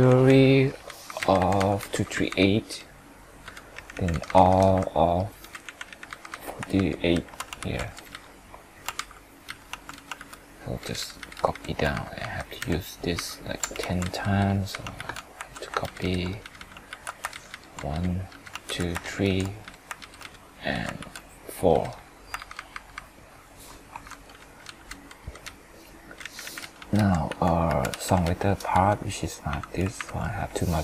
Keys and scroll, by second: 6.8 ctrl+shift+Up, 7.1 ctrl+shift+Right, 7.6 ctrl+c, 7.7 ctrl+Down, 8.9 ctrl+Up, 10.2 ctrl+v, 11.9 ctrl+shift+Up, 12.6 ctrl+shift+Right, 13.1 ctrl+shift+Up, 13.8 ctrl+c, 14.9 ctrl+v, 15.5 ctrl+Down, 16.9 ctrl+v, 17.3 ctrl+Down, 19.0 ctrl+Down, 21.0 ctrl+v, 22.3 ctrl+Up, 28.7 F2, 29.9 ctrl+Page_Up.